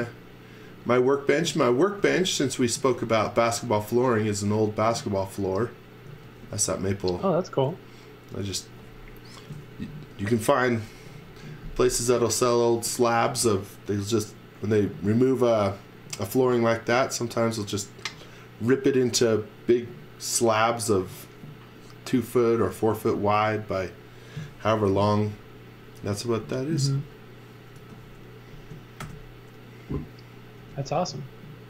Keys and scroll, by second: 1.4 z, 1.9 x, 2.8 z, 3.4 x, 6.2 x, 26.8 z, 27.8 x, 29.0 shift+5, 30.6 m.